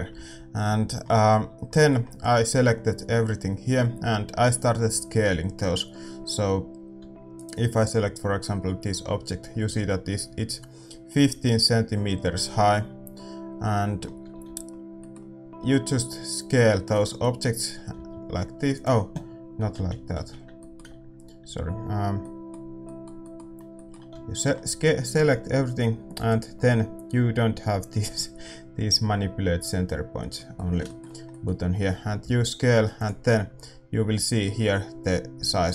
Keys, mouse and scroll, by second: 7.4-13.6 right drag, 7.4 a, 13.6-18.6 middle drag, 18.2 s, 26.1-30.0 drag, 26.1-35.3 middle drag, 26.1 a, 35.3 s.